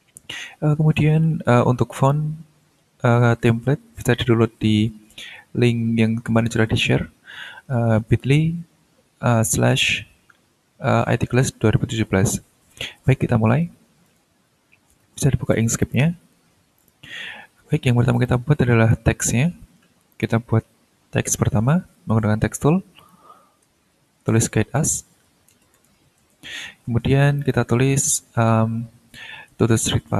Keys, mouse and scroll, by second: 4.8-5.5 scroll down 2, 5.8-6.1 scroll up 2, 14.0 click, 15.8 click, 16.8 click, 18.1 click, 18.7 middle click, 19.4 middle click, 20.1 click, 23.0 click, 23.6-26.3 typing, 27.4 click, 29.7-30.1 typing.